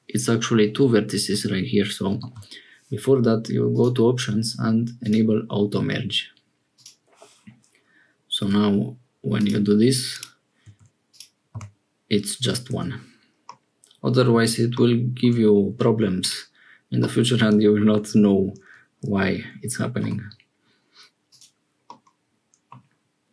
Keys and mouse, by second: 2.2 ctrl+z, 3.8-6.7 drag, 8.4 g, 10.6 1, 11.0 click, 11.5 g, 13.4 click, 16.1 click, 17.0 click, 21.8 click.